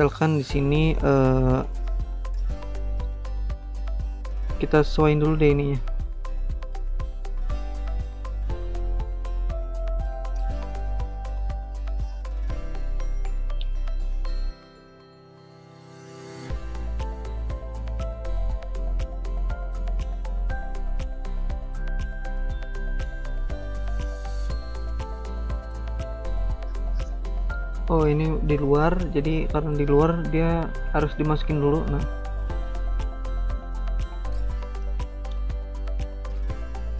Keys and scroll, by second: 11.1 ctrl+z.